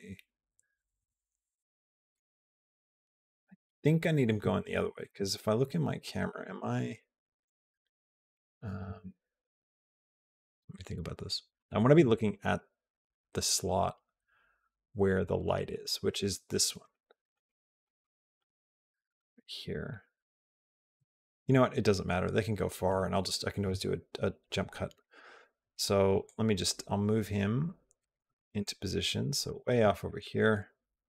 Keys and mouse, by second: 0.0-2.0 middle drag, 2.6 shift+middle click, 3.2 shift+middle click, 3.8 shift+middle click, 4.9 KP_0, 16.8 shift+middle click, 17.3 middle click, 17.9 shift+middle click, 18.9-21.6 shift+middle drag, 26.2-29.7 drag, 30.1-31.0 drag.